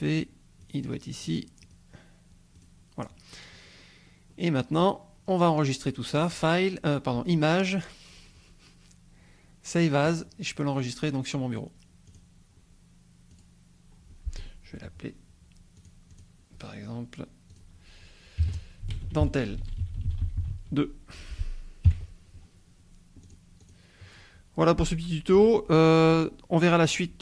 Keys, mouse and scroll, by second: 1.2 click, 1.7 click, 2.6 click, 3.6-5.7 scroll down 1, 6.2 click, 10.0 click, 12.0 click, 13.3 click, 15.8 click, 16.1 click, 18.4-20.5 typing, 21.9 KP_2, 23.2 click, 23.6 click.